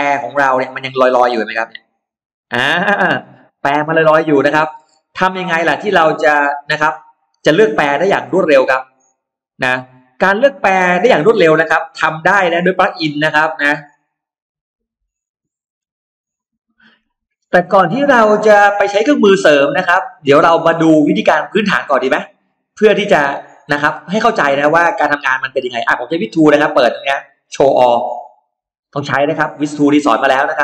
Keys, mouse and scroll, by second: 2.7-4.5 scroll down 3, 4.1 middle click, 15.4 F9, 18.0-19.5 scroll down 4, 20.4 click, 20.8 middle click, 21.1-21.4 scroll down 1, 22.4 middle click, 22.4-23.0 scroll down 1, 23.2 click, 23.6 middle click, 23.6 scroll up 1, 23.8 scroll down 1, 24.0-24.3 scroll up 1, 24.4 middle click, 28.1 click, 28.8 middle click, 29.3-29.6 scroll down 1, 30.4-30.6 middle drag.